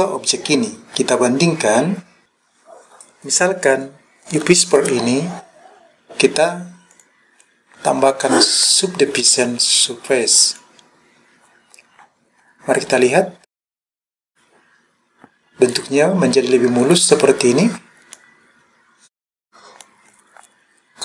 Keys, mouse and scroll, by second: 1.4-2.0 scroll up 1, 2.0 scroll down 2, 2.2 click, 6.9-10.7 drag, 12.0-12.8 scroll up 3, 12.8-13.4 scroll up 2, 13.4-15.5 scroll down 3, 15.5-15.9 scroll up 1, 18.2-19.9 middle drag.